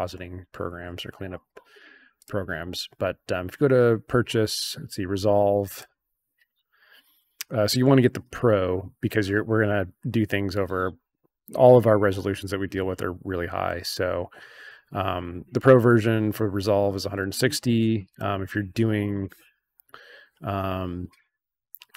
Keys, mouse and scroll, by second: 0.7 scroll up 2, 2.1 click, 5.7 click, 13.7 scroll down 2, 17.2 click, 17.7 scroll down 2, 18.1 click, 19.0 click, 20.1-20.4 scroll down 2.